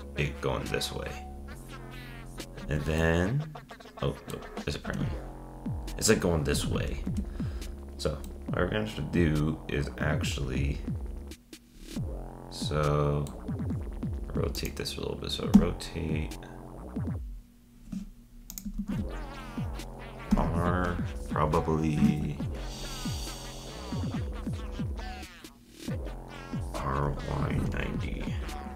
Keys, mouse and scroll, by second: 2.6 Tab, 3.0-4.9 middle drag, 4.9 Tab, 7.1 Tab, 8.2-11.4 middle drag, 14.5-15.5 drag, 15.5 r, 18.8 z, 20.3 r.